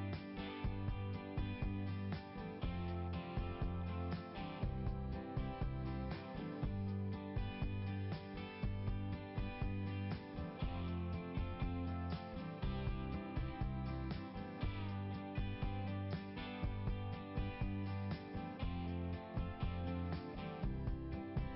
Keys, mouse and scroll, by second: 2.4 scroll up 1, 7.0 scroll down 1, 8.5 scroll down 1, 8.7 scroll up 1, 14.0 right click, 15.2 click.